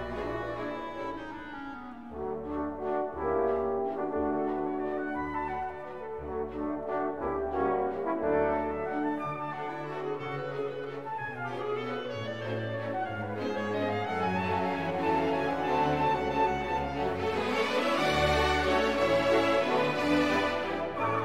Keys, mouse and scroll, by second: 0.2-1.4 drag, 3.0 click, 4.2-5.7 drag, 5.8 0, 6.5 scroll down 2, 6.9 scroll up 2, 8.9 click, 11.7 click, 12.8 click, 14.3-14.6 scroll down 1, 16.6 click, 17.8 4, 18.2 0, 18.9-19.5 scroll down 2, 20.0 click, 21.0 8.